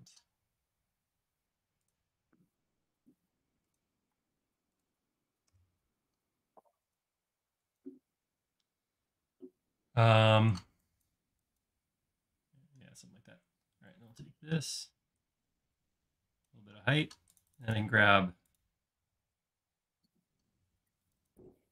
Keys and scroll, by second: 0.4 |, 4.2 space, 5.5 BackSpace, 6.3 e, 13.0 space, 14.0 p, 16.8 space.